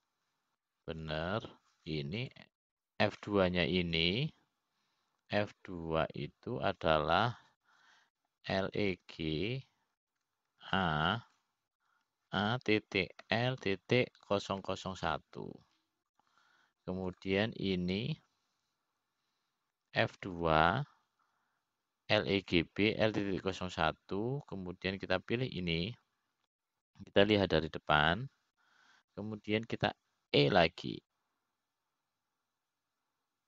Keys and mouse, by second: 2.3 o, 4.9-6.8 drag, 8.7 F2, 17.2 KP_0, 19.8-21.8 drag, 22.9 F2, 27.1-29.1 drag, 33.1 e.